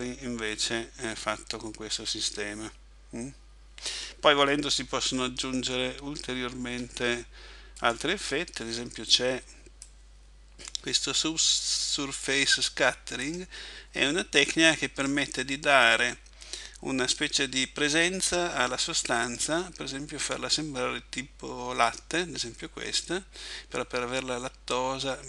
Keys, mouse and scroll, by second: 6.7 Escape, 7.9 right click, 9.9 click, 12.3 click, 19.3 click.